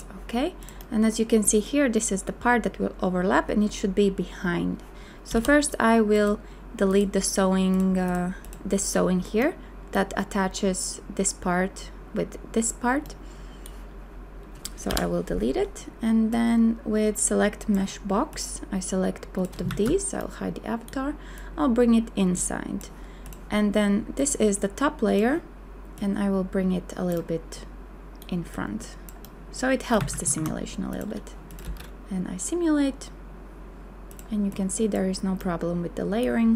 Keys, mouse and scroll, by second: 5.3 b, 14.9 Delete, 19.7 shift+a, 30.0 a, 30.5 q, 31.6 space.